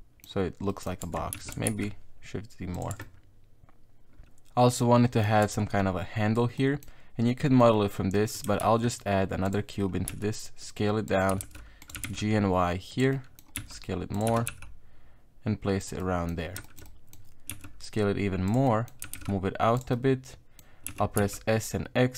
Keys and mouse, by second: 0.7 middle click, 1.0 Tab, 1.3 s, 2.9 Tab, 3.0-4.8 middle drag, 5.0 middle click, 5.4 Tab, 6.6 middle click, 7.6 middle click, 8.6 shift+a, 10.1 s, 11.3 g, 11.9 g, 13.1 middle click, 13.6 s, 14.3 g, 16.0 middle click, 16.7 shift+middle click, 16.9 middle click, 17.5 s, 18.7 middle click, 19.0 g, 19.9 middle click, 20.9 s.